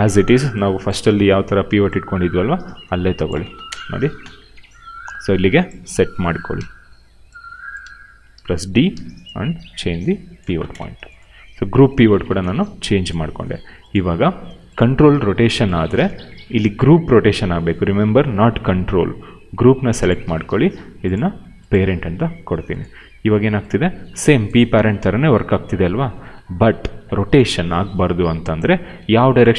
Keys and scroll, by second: 1.2 d, 3.4 space, 4.1 f, 6.5 d, 7.8 ctrl+z, 8.8 d, 10.4 space, 11.2 e, 12.4 ctrl+z, 16.0 ctrl+z, 22.9 e, 26.8 ctrl+z, 28.9 ctrl+z.